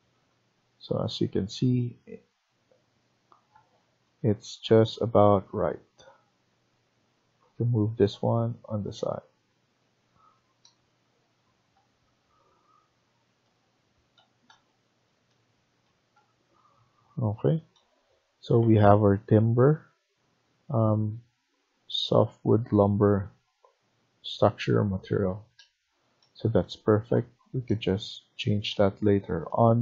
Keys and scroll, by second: 8.2 Right, 8.9 Right, 9.3 Right, 14.2 Escape, 24.7 Escape, 25.0 Escape, 25.3 Escape.